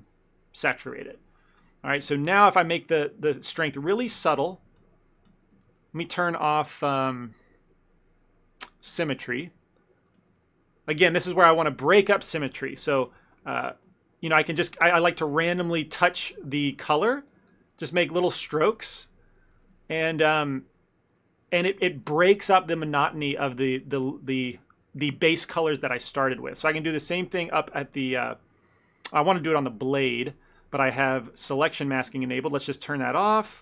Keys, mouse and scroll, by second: 2.3 f, 2.5 f, 3.8 shift+middle click, 4.1 f, 4.6 click, 4.9 click, 5.3 f, 5.7 ctrl+z, 6.0 ctrl+z, 7.8 middle click, 9.2 click, 10.2 f, 10.4 click, 11.3 middle click, 11.6 ctrl+middle click, 13.0 f, 13.5 click, 13.7 click, 14.4 click, 14.6 click, 15.0 click, 15.0 middle click, 15.4 click, 15.6 click, 15.9 shift+middle click, 16.2 click, 16.4 click, 17.7 click, 17.8 middle click, 18.0 middle click, 18.0-18.6 shift+middle click, 18.2 middle click, 18.3 shift+middle click, 18.4 middle click, 18.9 click, 19.1 click, 19.6 middle click, 19.8 ctrl+middle click, 19.9 ctrl+middle click, 20.1 middle click, 21.3 middle click, 21.6 shift+middle click, 21.7 shift+middle click, 21.9 ctrl+middle click, 23.0 middle click, 23.2 shift+middle click, 23.9 click, 24.6 click, 24.7 shift+middle click, 26.2 click, 26.5 click, 27.0 click, 27.1 shift+middle click, 27.5 click, 27.7 click, 28.0 ctrl+middle click, 28.4 middle click, 28.6 middle click, 28.7 shift+middle click, 28.8 ctrl+middle click, 32.2 click, 33.2 click.